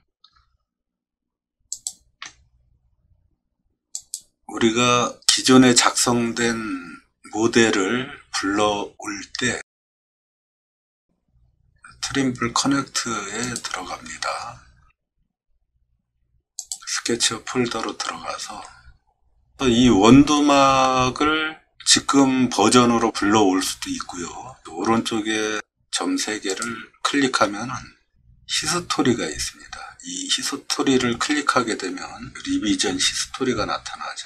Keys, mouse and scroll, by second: 26.5 click.